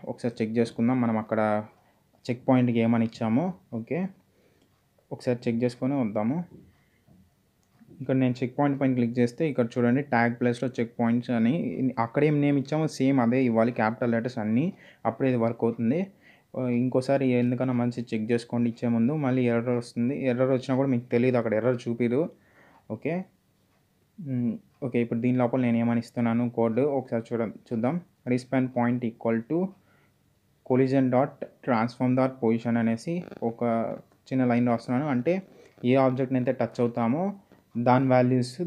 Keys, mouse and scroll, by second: 0.6 [, 0.8 Return, 2.7 click, 2.9 space, 3.5 click, 3.6 space, 4.1 click, 6.7 click, 11.5 click, 12.9-16.2 typing, 17.6 typing, 18.8 click, 21.2 click, 24.8 click, 26.7-28.0 typing, 28.2 Return, 29.9 =, 32.0-36.4 typing, 36.5 Return.